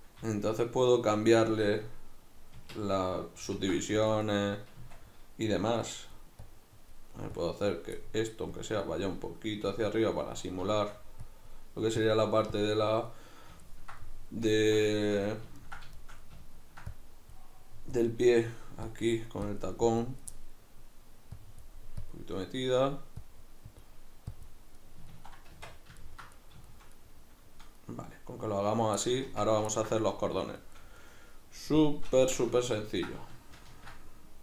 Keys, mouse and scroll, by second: 1.8 Tab, 3.5 ctrl+r, 4.4 right click, 4.8 Tab, 5.8-8.0 drag, 8.0 middle click, 8.5-10.4 drag, 10.4 middle click, 11.3-13.1 drag, 13.1-16.9 middle drag, 16.9-20.3 drag, 20.3-21.4 middle drag, 21.4-22.5 drag, 22.5 middle click, 23.3-24.8 drag, 24.8-32.2 middle drag, 25.5 Tab, 29.3 Tab, 32.2 Tab, 32.7-33.7 ctrl+middle drag, 33.7 ctrl+r.